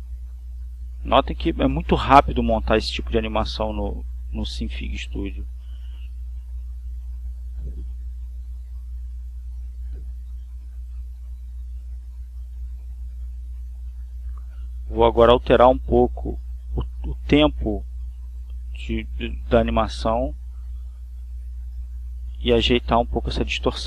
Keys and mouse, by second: 0.0 click, 2.7 click, 3.5 click, 5.5-11.4 drag, 13.0-14.2 drag, 14.5 click, 15.2-16.7 drag, 16.9-18.6 drag, 19.2 click, 20.3 click, 22.2 Down.